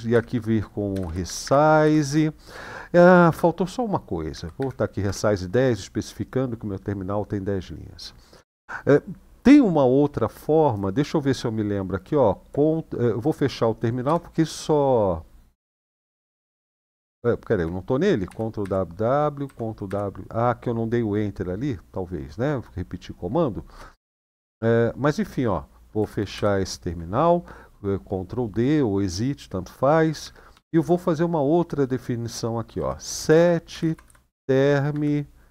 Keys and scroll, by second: 0.7-1.8 typing, 3.1 space, 4.1-5.3 typing, 13.8 ctrl+d, 18.0 ctrl+w, 18.4 ctrl+w, 19.2 ctrl+w, 19.6 ctrl+w, 26.1 ctrl+d, 30.4 typing, 32.5-35.5 typing.